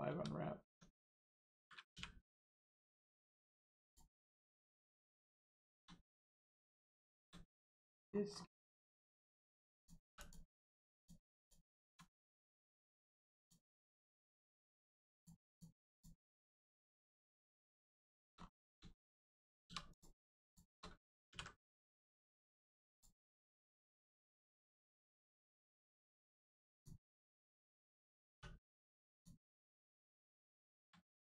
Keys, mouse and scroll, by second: 0.1 Tab, 1.9 u, 3.0 click, 4.2 scroll down 1, 4.6 shift+middle click, 7.0 shift+middle click, 7.8 middle click, 8.0 scroll up 1, 8.8 shift+middle click, 9.8 click, 10.2 click, 13.4 click, 15.9 click, 16.3 l, 17.2 scroll up 1, 17.6 middle click, 18.0 shift+middle click, 18.4 scroll up 1, 18.9 shift+middle click, 19.3 scroll down 1, 19.6 2, 19.9 click, 20.4 shift+click, 21.3 ctrl+e, 22.2 click, 23.2-24.0 scroll down 1, 24.3 shift+middle click, 26.7 click, 28.3 3, 29.1 click, 29.9 scroll down 1, 30.6 shift+middle click, 31.0 middle click, 31.0 middle click.